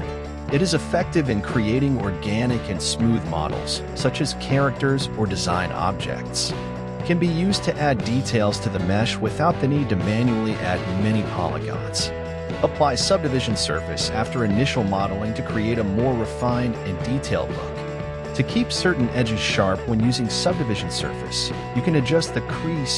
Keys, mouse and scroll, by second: 5.6 click, 12.0 click, 15.9 click.